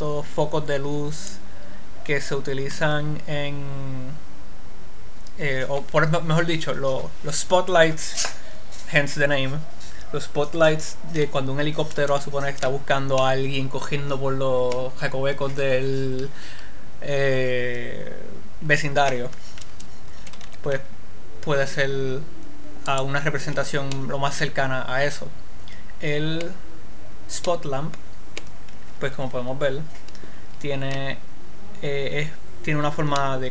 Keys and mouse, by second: 20.7 r, 23.7 click, 24.4-28.2 middle drag, 30.4 middle click, 31.2-32.2 middle drag.